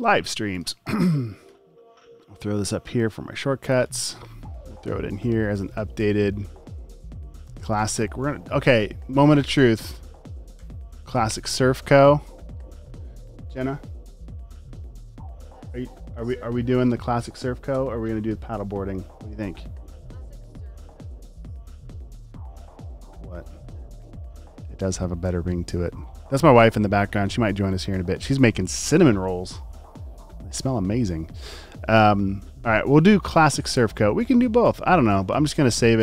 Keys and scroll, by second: 9.1-10.7 typing.